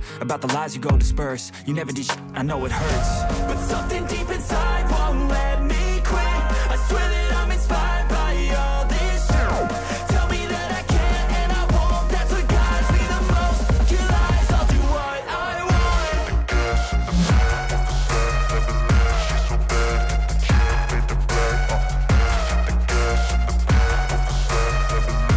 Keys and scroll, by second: 24.4 ctrl+d.